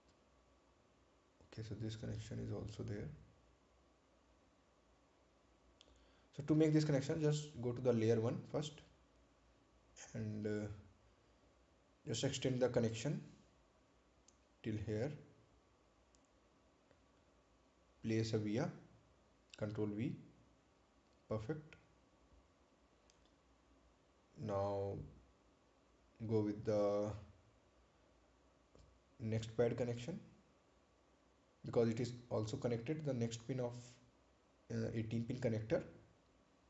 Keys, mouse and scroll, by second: 0.8 ctrl+click, 4.9 scroll up 1, 8.5 click, 10.9 click, 15.5 click, 17.4 right click, 21.2 ctrl+v, 22.5 click, 29.7 click.